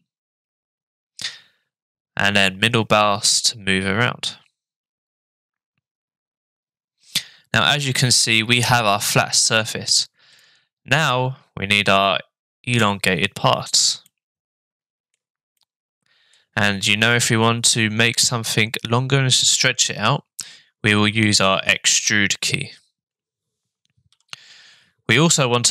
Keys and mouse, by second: 2.4-7.1 middle drag, 7.9 shift+middle click, 10.4 shift+middle click, 14.0-15.1 shift+middle drag, 15.6 middle click, 17.2 shift+middle click.